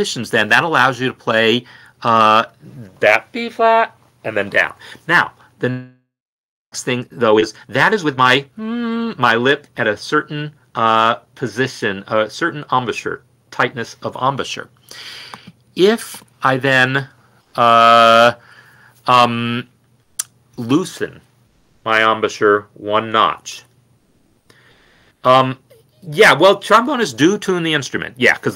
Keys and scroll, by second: 3.5 n.